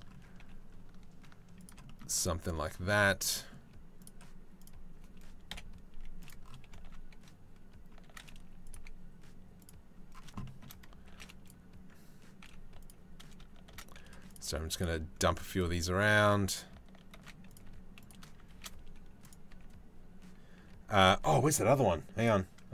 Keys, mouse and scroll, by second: 0.0 g, 2.0 click, 3.0 click, 3.6 click, 5.1 KP_7, 5.5 z, 6.5 shift+g, 7.7 shift+d, 8.4 r, 10.1 shift+middle click, 10.8 shift+d, 12.0 r, 13.4 shift+d, 14.1 r, 15.2 click, 16.8 shift+d, 17.3 r, 18.1 shift+d, 19.1 r, 20.2 r.